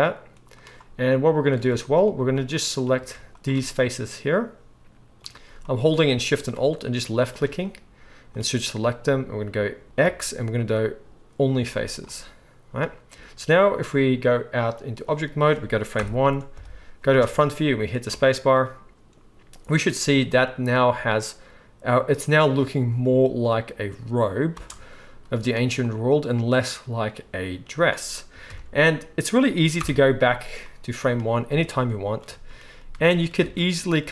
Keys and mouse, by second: 3.4-14.6 alt+shift+middle drag, 10.0 x, 14.6-33.9 drag, 16.0 shift+Left, 16.5 KP_1, 18.1 space, 24.7 space, 28.4 shift+KP_1, 29.8 shift+Left, 31.9 Tab, 33.5 alt+a, 33.9-34.1 shift+middle drag.